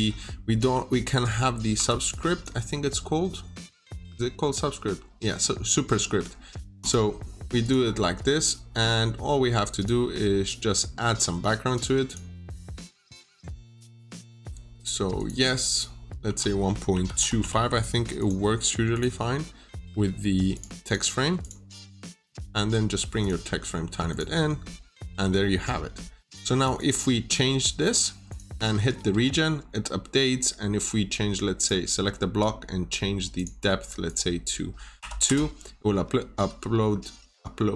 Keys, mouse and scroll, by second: 0.5 m, 1.6 3, 2.0 click, 8.2 scroll down 1, 8.4 middle click, 9.7 click, 12.0 double click, 13.9 click, 15.5 double click, 16.2-17.8 typing, 18.1 click, 20.7 double click, 21.3 click, 22.1 scroll up 1, 23.1 click, 24.5-24.9 scroll down 1, 24.9 Escape, 25.6 scroll up 1, 25.9 scroll down 1, 26.1 middle click, 26.5 click, 26.7 double click, 27.7 click, 28.5 Escape, 28.5 Escape, 28.6-29.4 typing, 29.5-30.3 scroll up 1, 31.5 click, 33.2 click, 34.9 2, 35.2 Return, 35.9-36.2 scroll down 1, 36.4 Escape, 36.4 Escape, 36.8 scroll up 1.